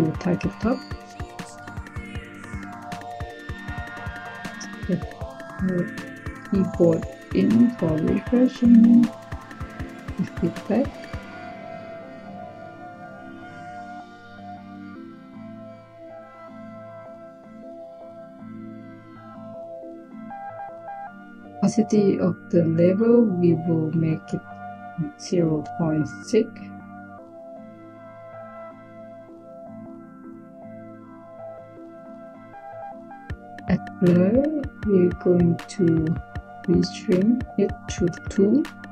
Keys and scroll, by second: 2.9 Tab, 5.6 k, 6.1 e, 24.7-26.4 typing, 37.9 typing.